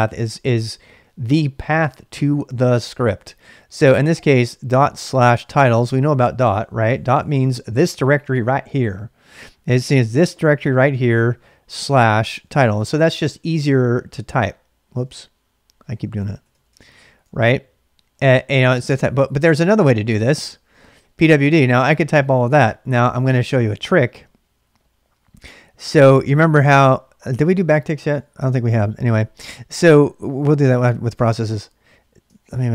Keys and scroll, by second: 5.1-6.4 typing, 6.6 Return, 10.4-11.1 typing, 12.1-13.2 typing, 14.6-20.6 typing, 17.2 Return, 32.3 ctrl+a, 32.4 ctrl+a.